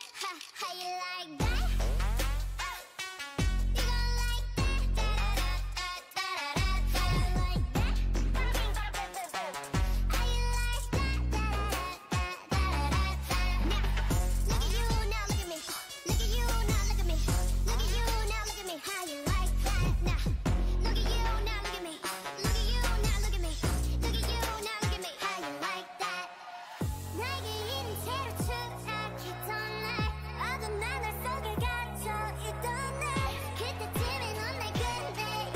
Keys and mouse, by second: 0.3 g, 2.3-5.9 drag, 2.9 g, 4.7 g, 5.6 Tab, 7.4 Tab, 8.4 g, 9.5 Tab, 11.9 z, 12.8 Tab, 13.6 a, 16.7 z, 17.4 Tab, 18.1 a, 24.1-26.1 right drag, 25.5 click, 25.6 Tab, 26.1 a, 26.5 l, 27.3 p, 28.4 Tab, 28.8-30.4 drag, 31.2-34.3 drag, 34.3 ctrl+z, 34.7 click.